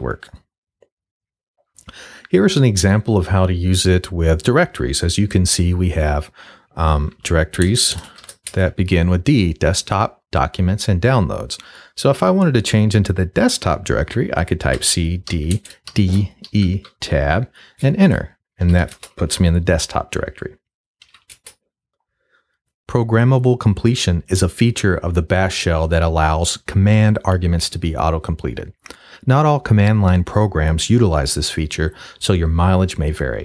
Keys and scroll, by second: 7.0-8.2 typing, 8.5 shift+Return, 14.7-16.5 typing, 16.9 shift+Tab, 17.8 Return, 18.3-19.3 typing, 20.8-21.6 typing.